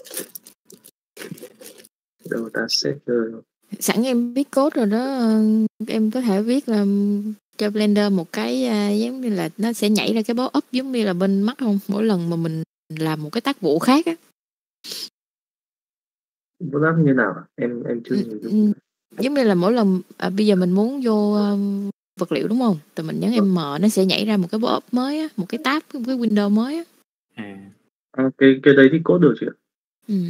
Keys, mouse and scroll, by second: 0.9 click, 3.0-4.0 drag, 4.0-5.1 right drag, 6.1 click, 6.7 n, 7.3 middle click, 7.9 middle click, 8.9 click, 9.8 click.